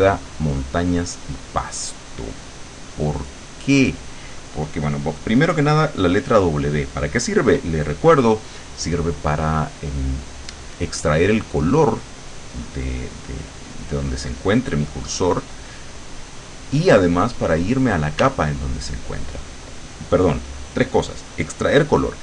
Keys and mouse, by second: 1.8 click, 18.3 w.